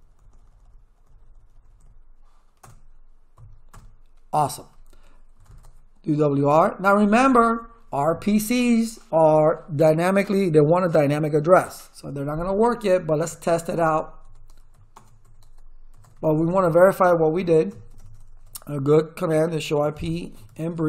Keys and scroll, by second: 2.6 BackSpace, 3.3 1, 3.7 Return, 5.1-6.9 typing, 7.2 Return, 12.7-16.5 typing, 17.3 ctrl+z, 17.7 Return, 19.0-20.8 typing.